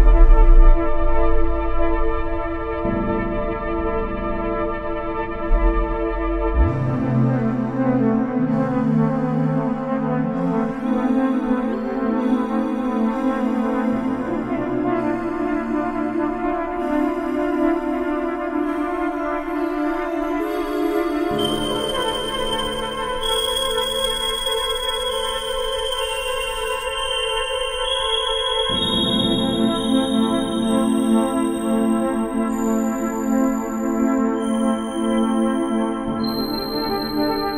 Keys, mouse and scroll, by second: 3.2-4.3 drag, 4.7-8.7 drag, 9.5 drag, 9.9-11.0 drag, 11.6-12.2 drag, 12.6 click, 14.0 click, 15.3 click, 15.4 drag, 15.8-18.0 drag, 18.1-21.0 drag, 21.1-24.2 drag, 24.2-25.1 drag, 25.2 click, 25.5-27.9 drag, 28.3-32.0 drag, 33.0-37.2 drag, 37.3 click.